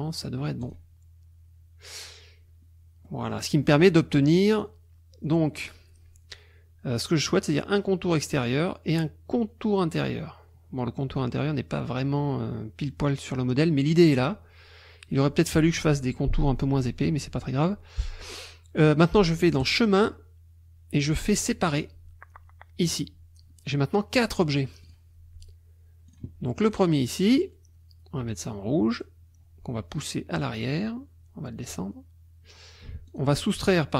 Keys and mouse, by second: 0.6 click, 3.1 middle click, 4.5 click, 19.6 click, 22.8 click, 24.8 click, 26.1 click, 26.8 click, 28.9 click, 31.7 click, 33.1 shift+click.